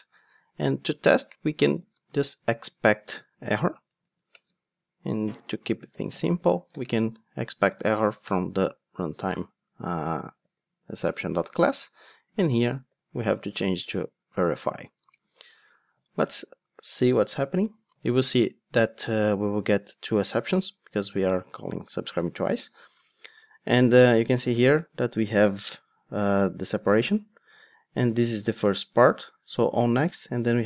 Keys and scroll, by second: 4.3 Return, 13.5 Return, 17.3 ctrl+d.